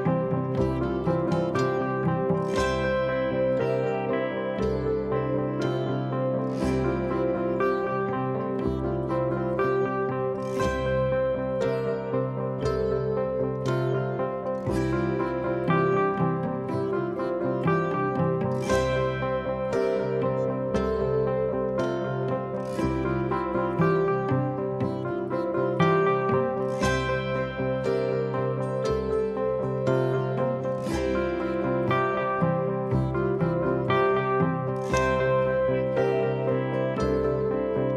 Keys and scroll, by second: 4.8 ctrl+d, 4.9 Escape, 8.9 ], 9.7 4, 12.5 3, 13.1 4, 17.8 3, 19.9 4, 21.3 F9, 21.8 3, 26.3 ctrl+d, 26.5 Escape, 27.3 Escape, 35.0 4, 36.3 3.